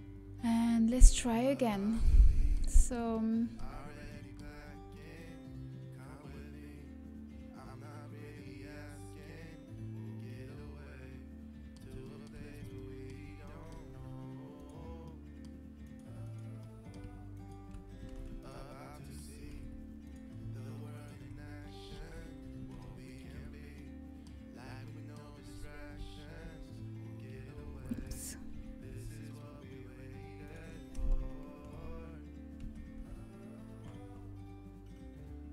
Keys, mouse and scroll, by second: 4.1-7.4 middle drag, 11.8-15.1 middle drag, 15.0 right click, 18.0 ctrl+z, 20.3 ctrl+z, 21.9 ctrl+z, 23.7-25.1 middle drag, 27.3 f, 27.3 y, 29.9 ctrl+z, 29.9 g, 31.5 ctrl+z, 31.5 g, 32.9 g.